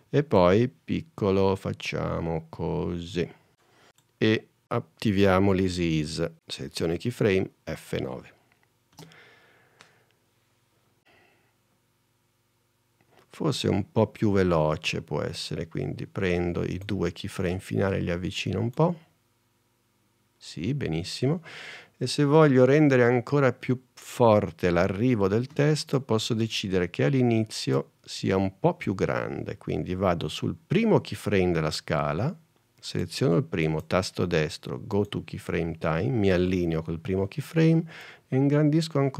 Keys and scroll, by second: 7.2 F9, 9.1 space, 25.7 space.